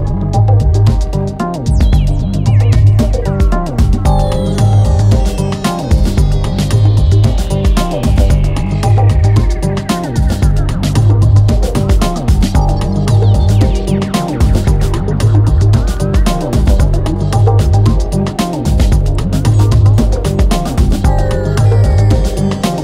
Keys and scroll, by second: 3.5 F9, 7.4 F1, 8.6 2, 19.5 Delete.